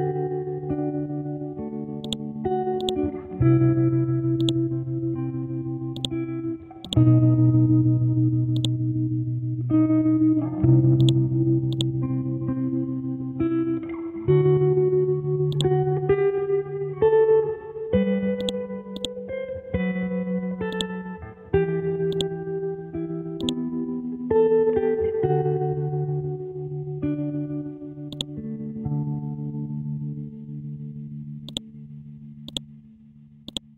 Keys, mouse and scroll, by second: 9.6 scroll down 1, 10.4 scroll up 1, 11.0 click, 12.6-13.4 scroll down 1, 13.6 scroll up 1, 13.9 Down, 14.6 scroll down 1, 15.5-18.4 drag, 19.7-20.7 scroll up 1, 20.7 click, 27.0 ctrl+Num_Lock, 27.0 click, 27.1 ctrl+z, 28.1 click, 28.6-29.0 scroll down 1, 29.0 ctrl+z, 30.0 scroll up 1, 31.5 click.